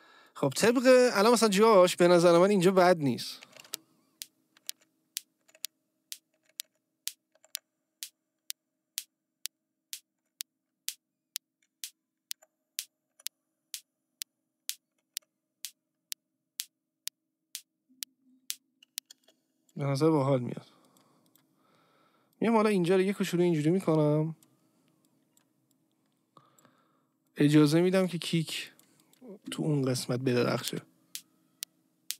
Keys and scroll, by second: 3.6 space, 4.6 Up, 19.1 space, 30.6 space.